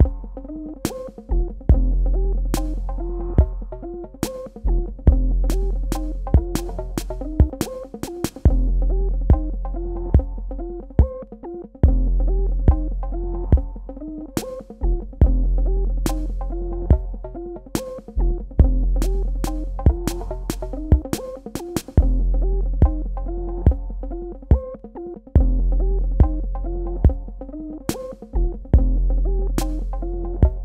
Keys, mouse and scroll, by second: 1.4 shift+Down, 2.5 shift+Left, 3.7 shift+Down, 4.0 shift+Left, 4.9 shift+Down, 7.9 shift+Right, 10.1 click, 17.2 m, 18.2 click, 25.9 v, 28.0 click, 29.5 shift+click, 30.5 right click.